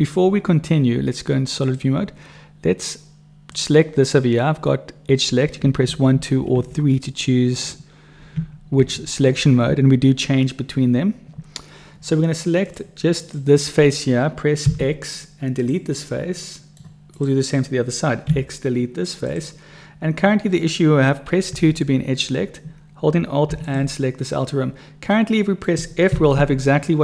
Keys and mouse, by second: 3.3 click, 5.8 1, 6.1 2, 6.6 3, 8.3 2, 8.8 1, 9.5 3, 13.2 click, 14.6 x, 16.4 click, 17.1 click, 18.3 x, 20.2 click, 21.6 2, 23.5 click, 25.2 click, 25.2 right click, 26.0 f.